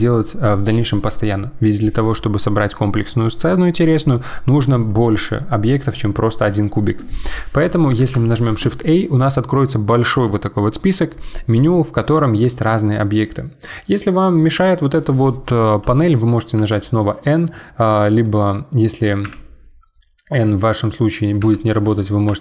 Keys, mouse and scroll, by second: 16.6 n, 18.2-19.2 drag, 19.2 n, 20.7 click, 21.4 n, 21.8 click, 22.3 n.